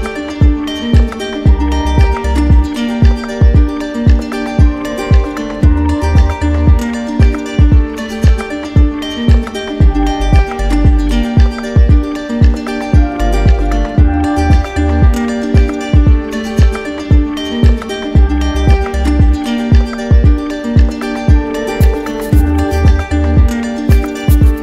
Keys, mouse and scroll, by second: 0.0 click, 2.7 click, 4.1 alt+click, 4.9 click, 5.5 shift+click, 8.3 alt+click, 9.4 click, 11.7 alt+click, 12.7 q, 13.8 ctrl+click, 17.5 click, 18.6 click, 19.3 click, 20.3 click, 21.8 click, 22.2 shift+click, 23.2 click, 24.4-24.6 drag.